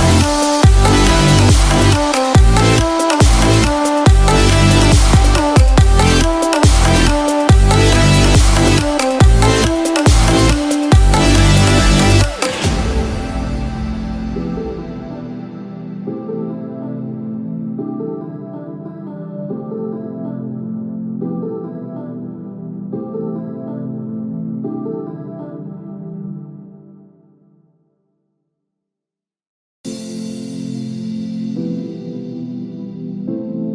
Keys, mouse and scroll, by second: 0.6 click, 0.6-1.9 scroll up 1, 6.0 scroll down 1, 6.3 middle click, 7.4-7.8 scroll up 3, 7.8 middle click, 9.1-9.5 scroll down 3, 9.5 click, 9.9-10.3 scroll down 2, 10.3-10.8 scroll up 2, 10.8 click, 11.2 scroll up 1, 11.3 scroll down 2, 11.5-11.8 scroll up 5, 11.8-12.5 scroll down 5, 12.8 scroll down 9, 12.9-13.2 scroll up 2, 15.4 Tab, 16.4 right click, 26.4 click, 27.8 Tab, 28.2 scroll up 1, 29.1 scroll up 7, 29.4 click, 29.8-30.6 scroll down 12, 31.0-32.7 scroll up 7, 32.9 click.